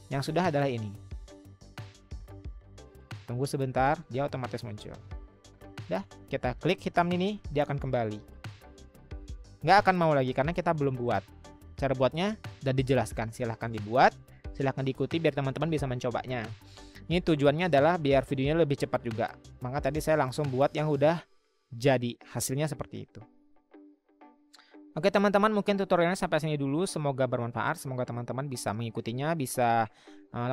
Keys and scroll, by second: 12.5 Escape.